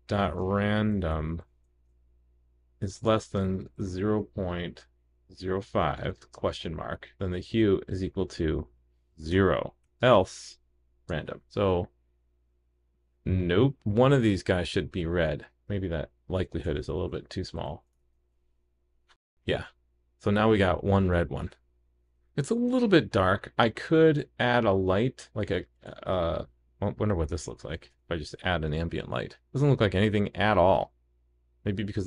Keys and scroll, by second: 11.3 super+s, 13.8 super+s, 18.0 super+s, 27.9 super+/, 28.1 super+s.